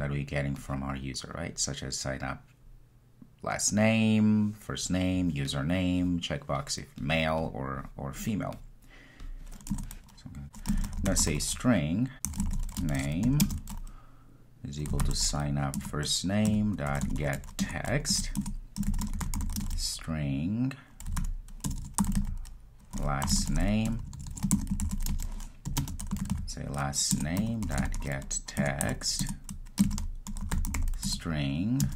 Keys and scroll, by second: 15.9 Return, 27.2 Return.